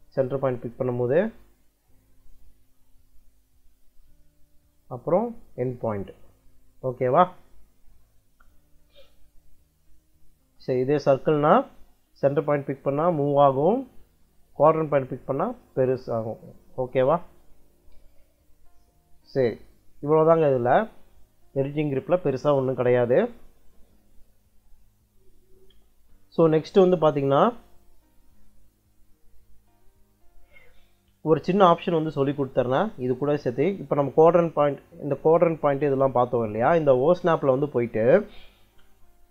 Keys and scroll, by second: 8.7 Escape, 18.7 Escape, 31.8 o, 32.1 s, 32.5 space.